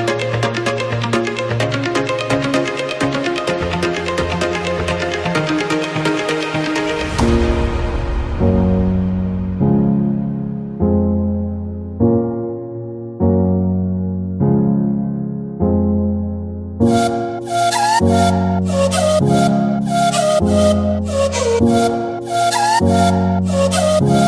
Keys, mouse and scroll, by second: 0.4-2.4 drag, 2.7-4.0 drag, 4.0 Escape, 4.1-5.3 drag, 5.3 KP_Enter, 6.2 scroll down 2, 6.4-7.1 middle drag, 7.1 alt+a, 7.5 ctrl+s, 8.3 scroll up 2, 8.6 ctrl+s, 9.2-10.3 drag, 10.3 KP_1, 10.9-12.3 middle drag, 12.3 ctrl+s, 13.8-15.0 shift+middle drag, 15.0-15.5 scroll down 2, 16.5 ctrl+s, 19.6 click, 20.8-24.2 drag.